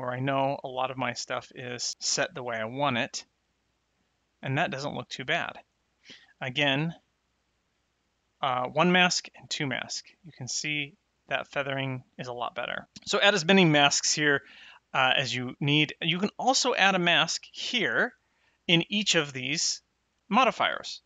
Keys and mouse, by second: 7.9 click, 9.2 click, 11.0 middle click, 12.2 middle click, 16.9 click, 19.1 click.